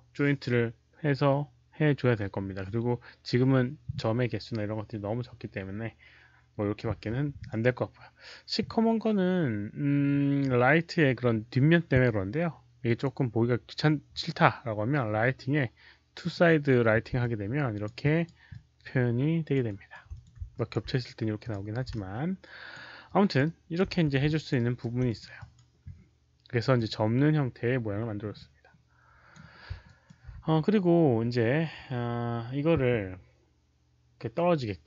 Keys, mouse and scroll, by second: 7.3 click, 12.8 click, 16.1 click, 17.1 alt+click, 17.9 alt+right click, 18.4-19.4 alt+drag, 19.6 alt+right click, 20.0 alt+click, 20.4 alt+click, 20.4 alt+right click, 21.3 alt+click, 21.3 alt+right click, 21.8 alt+click, 23.0 alt+click, 23.3 alt+right click, 23.9 q, 24.2 alt+click, 24.5 alt+right click, 25.0 alt+click, 25.3 alt+click, 26.7-29.2 alt+drag, 26.7 alt+right click, 26.7 q, 28.4 alt+right click, 28.4 q, 29.8 alt+click, 30.2 q, 33.8 alt+click, 33.8 alt+right click, 33.8 q.